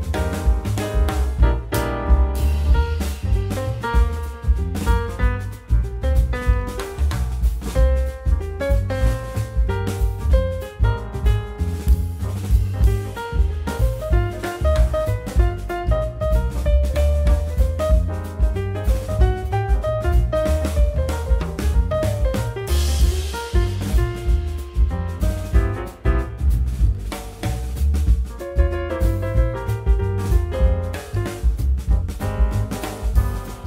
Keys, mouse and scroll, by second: 1.4 click, 2.4 ctrl+z, 2.9 g, 4.2 click, 5.2 shift+g, 6.0 shift+click, 7.0 shift+d, 10.6 g, 11.9-12.2 middle drag, 12.2-12.5 scroll down 3, 12.7 g, 14.6-15.4 middle drag, 15.4 click, 15.9-16.2 scroll down 2, 16.2-17.6 scroll up 1, 17.6-18.2 scroll up 1, 19.2-21.2 scroll down 4, 21.2 click, 21.8 scroll down 4, 22.1 click, 23.2 shift+click, 23.5-24.1 middle drag, 24.1 shift+click, 25.0 ctrl+Left, 25.9 scroll down 3, 26.1 middle drag, 26.3 scroll up 3, 26.8 click, 27.8 g, 29.6 g, 31.1 g, 32.4 g.